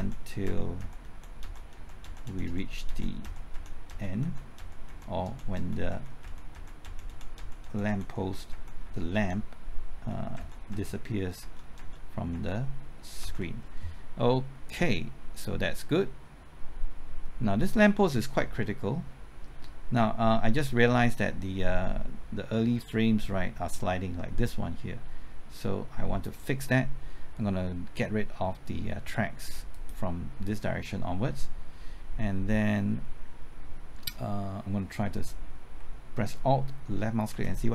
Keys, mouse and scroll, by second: 10.1-13.2 typing, 14.6-26.3 drag, 37.3 alt+Left.